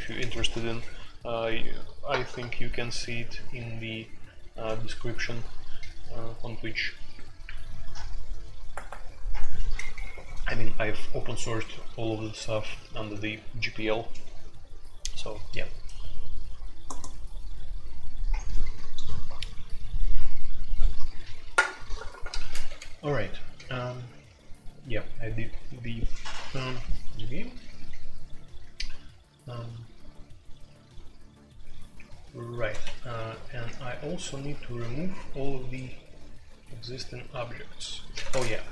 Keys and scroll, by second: 23.4 typing, 27.5 j, 27.7 k, 32.8 Escape, 33.1 F2, 33.6 k, 33.8 k, 38.2 space, 38.3 Tab.